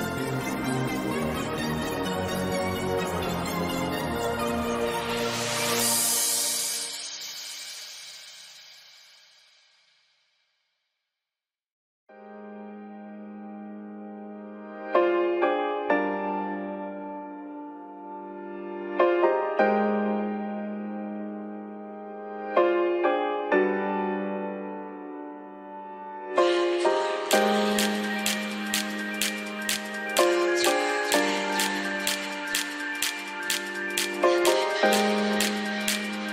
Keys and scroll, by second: 2.2 ctrl+z.